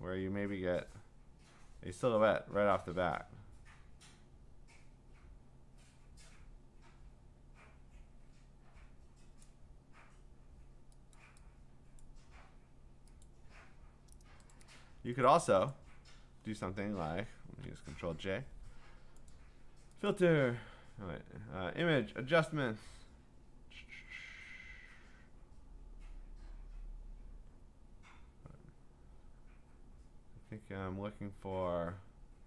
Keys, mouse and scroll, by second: 9.4 click, 11.1 click, 12.0 click, 13.2 click, 14.5 click, 15.3 click, 15.7 click, 17.9 ctrl+j, 19.3 click, 20.1 click.